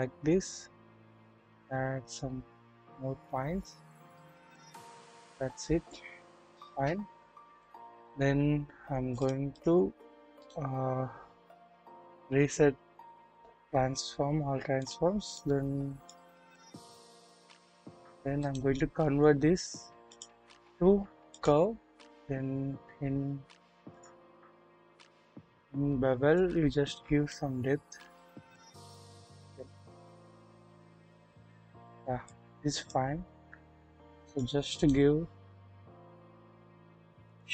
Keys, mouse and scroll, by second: 0.6-3.6 scroll up 1, 4.8-6.2 scroll down 1, 6.3 KP_1, 7.6 click, 7.6 typing, 9.2 double click, 10.3 right click, 10.4 click, 11.7 ctrl+a, 15.2 double click, 16.1 click, 17.0 scroll up 1, 17.7 click, 18.3 scroll up 1, 18.4-21.5 drag, 18.4 right click, 23.9 click, 24.6-24.9 scroll down 1, 27.3-31.1 drag, 32.2 click, 33.6-34.2 scroll up 1, 34.2 click, 34.7 right click, 34.8-37.3 drag.